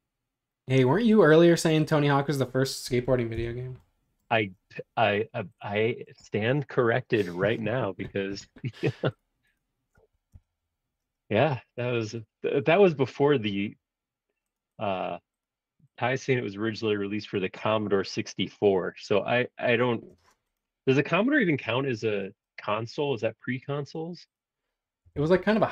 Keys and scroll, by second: 3.3 Return, 4.4 space, 10.3 Return, 13.5 b, 20.2 space, 23.9 space, 25.0 b.